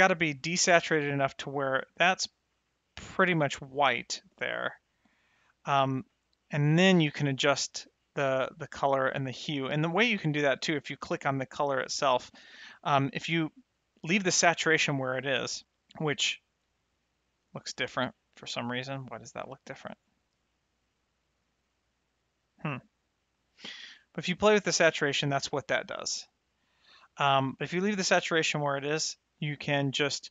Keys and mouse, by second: 7.8 middle click, 11.4 click, 19.1 click, 22.9 click, 24.1 click, 26.3 click, 26.3 right click, 28.6 click.